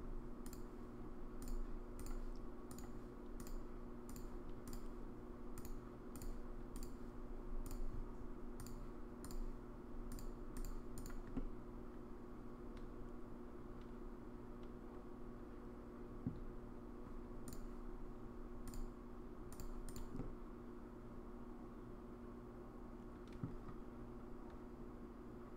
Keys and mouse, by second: 0.5 click, 1.5 click, 3.5 click, 5.7 click, 6.8 click, 7.6-8.7 drag, 10.3 click, 11.4-16.2 middle drag, 18.6 click, 20.2-23.4 middle drag.